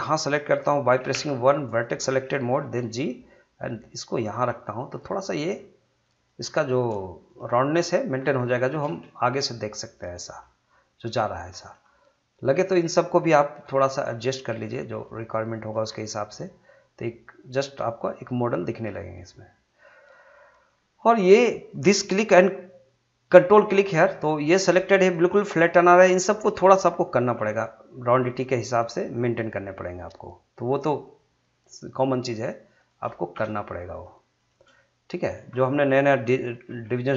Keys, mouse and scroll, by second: 1.1 1, 1.7 click, 2.6 g, 4.2 click, 4.5 middle click, 5.3 click, 5.4 g, 6.1 click, 6.4 scroll down 1, 6.6 middle click, 7.2 click, 7.4 g, 7.9 click, 8.2 scroll down 1, 8.4-10.7 middle drag, 10.7-11.0 scroll up 1, 11.0 middle click, 11.5 scroll up 1, 11.7 middle click, 12.5 click, 13.6 g, 14.2 click, 14.8 g, 15.5 click, 15.8 scroll down 1, 16.1-21.5 middle drag, 21.5 click, 23.6 ctrl+click, 24.1-27.2 middle drag, 27.2 g, 28.4 click, 28.8-32.9 middle drag, 32.9 click, 33.4 shift+click, 34.7 middle click, 36.7 g.